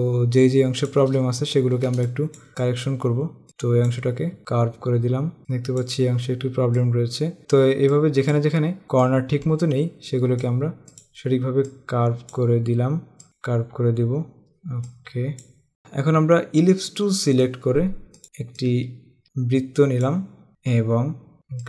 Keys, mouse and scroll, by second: 1.6-2.1 scroll up 1, 2.1 click, 4.5 space, 5.4 click, 7.5 click, 8.3 click, 9.4 click, 9.7 click, 9.8 space, 9.9 click, 10.9 click, 11.9 scroll up 1, 12.0 click, 12.6 space, 12.9 click, 15.1 click, 15.6 scroll down 1, 15.7 click, 17.4 right click, 18.2 click, 18.6 click.